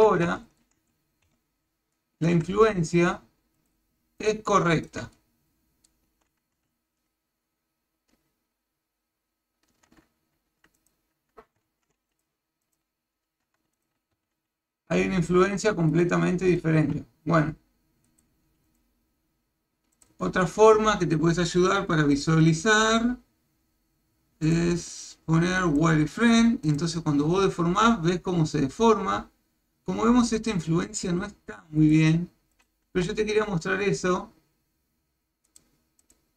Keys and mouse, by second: 0.2 shift+middle click, 1.2 KP_1, 2.0 shift+middle click, 3.0 ctrl+click, 3.6 ctrl+click, 4.2 ctrl+click, 4.8 ctrl+click, 5.1 shift+middle click, 6.7 ctrl+Tab, 10.8 click, 11.7 shift+z, 13.3 ctrl+Tab, 14.2 r, 16.5 click, 16.8 r, 18.7 click, 20.0 click, 22.1 click, 24.5 click, 25.7 click, 26.7 click, 27.3 r, 32.5 click, 32.9 r, 36.0 click.